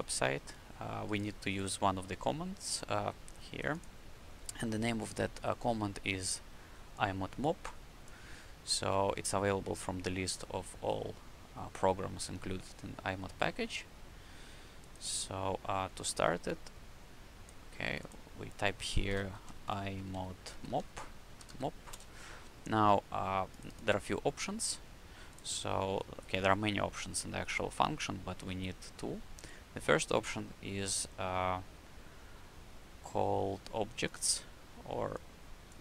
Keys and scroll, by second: 19.2-21.8 typing.